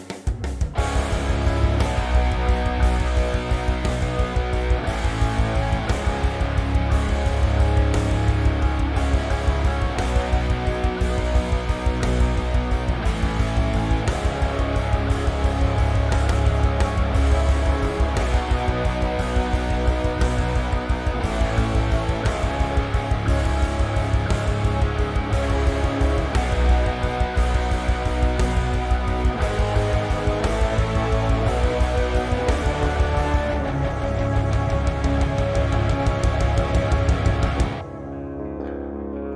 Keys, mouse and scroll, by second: 1.0 scroll down 2, 1.2-6.4 shift+middle drag, 1.6-2.2 scroll down 2, 2.5 scroll up 1, 3.8 scroll down 1, 4.2 a, 4.9 Tab, 6.4-8.4 right drag, 6.9 Escape, 7.2 p, 8.1 Tab, 8.4 click, 8.6 Tab, 10.3 shift+click, 10.6-11.3 shift+middle drag, 11.3 shift+click, 11.6-13.5 shift+middle drag, 12.4 scroll down 2, 13.5 ctrl+j, 14.4 scroll up 1, 14.8 middle click, 15.2-15.5 scroll up 1, 15.5 Tab, 15.7 a, 16.4 e, 19.2 click, 19.9 e, 21.4 click, 21.7 scroll up 1, 21.9-23.1 middle drag, 23.1 z, 23.7 ctrl+z, 24.5 e, 27.2 KP_Enter, 28.2 e, 31.1 KP_Enter, 31.5-31.9 scroll down 1, 31.9 middle click, 32.5 scroll up 1, 32.8 shift+middle click, 35.0 click, 35.8 click, 36.5-37.0 scroll down 2, 37.0-38.7 shift+middle drag, 37.6 z, 37.9 scroll down 2, 38.7 click.